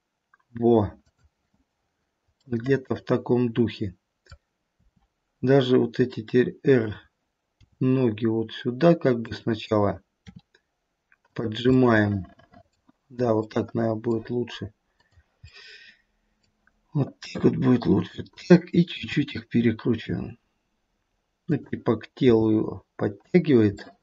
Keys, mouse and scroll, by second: 2.3 middle click, 3.5 middle click, 3.8 middle click, 4.4 click, 4.7 r, 7.6 g, 10.3 r, 11.6-13.2 scroll up 1, 13.2 middle click, 13.2 scroll up 1, 13.4 middle click, 14.6 middle click, 14.9 click, 15.6 middle click, 17.3 g, 19.1 r, 23.9 middle click, 23.9 g.